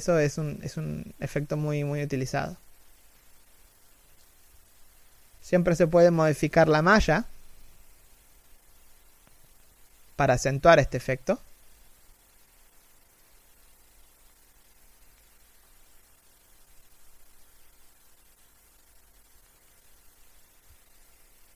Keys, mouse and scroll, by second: 0.2 g, 2.4-2.8 scroll down 1, 3.4 alt+right click, 3.7 g, 6.6 middle click, 12.6 middle click, 14.7 alt+right click, 15.1 alt+middle click, 15.7-16.8 scroll up 1, 17.6 middle click, 18.9 g.